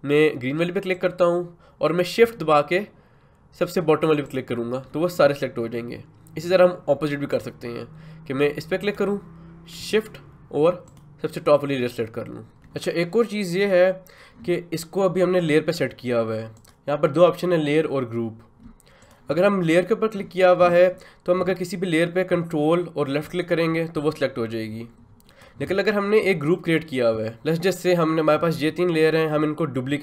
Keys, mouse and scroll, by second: 0.9 click, 16.6 click, 19.0-27.3 drag.